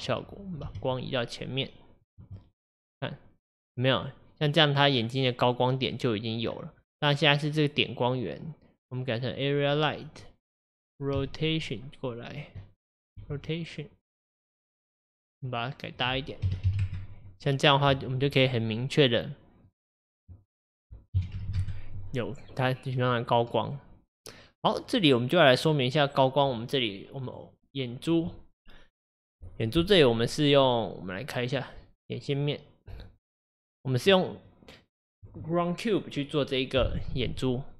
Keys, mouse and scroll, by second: 0.7 g, 2.5 middle drag, 2.7-3.1 scroll up 1, 3.5-3.8 scroll up 9, 3.8-5.0 middle drag, 5.0-6.4 scroll down 2, 6.8-8.0 scroll down 8, 9.4-11.2 drag, 11.2 r, 12.6 middle click, 13.2 r, 14.4-16.6 middle drag, 16.6-17.7 drag, 17.7-18.5 scroll up 1, 18.5-21.6 middle drag, 21.6 KP_0, 22.5-23.3 middle drag, 23.3-23.7 scroll up 2, 23.7-25.0 middle drag, 25.0-27.4 scroll down 1, 27.4 click, 32.9-33.5 drag, 33.5-34.8 scroll up 2, 34.8-36.0 scroll up 1, 36.0-37.7 scroll up 1.